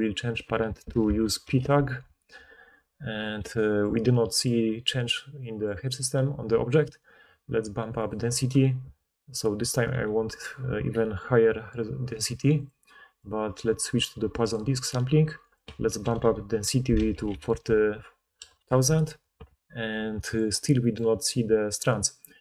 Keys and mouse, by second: 12.6 click, 13.1-20.4 middle drag, 16.2 4, 17.1 0.